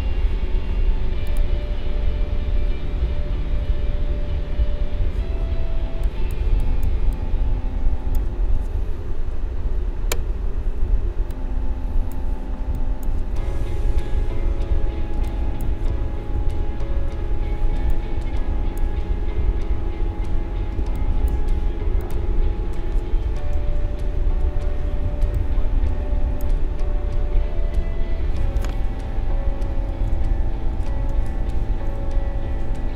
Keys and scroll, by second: 5.6 space, 9.4 ctrl+=, 15.2 space, 20.8 space.